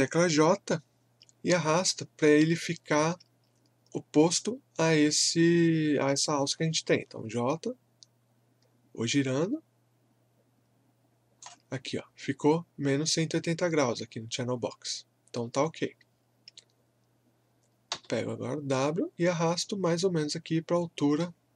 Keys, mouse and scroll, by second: 6.5-9.0 typing, 7.4 click, 13.4-14.1 typing, 17.9 w, 18.7-21.5 drag.